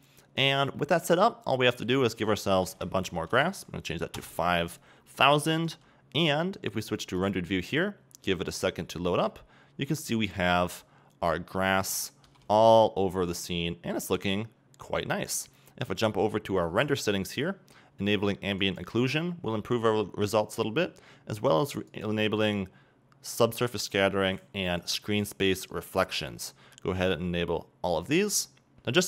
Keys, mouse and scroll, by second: 4.2 click, 4.3 KP_Enter, 6.2 scroll up 2, 7.3-8.9 drag, 9.0-10.7 middle drag, 10.7-11.8 scroll up 2, 11.8-12.4 scroll down 2, 12.4 a, 13.3 scroll up 2, 13.5-19.0 middle drag, 19.0-19.5 drag, 25.1 click, 28.7 right click.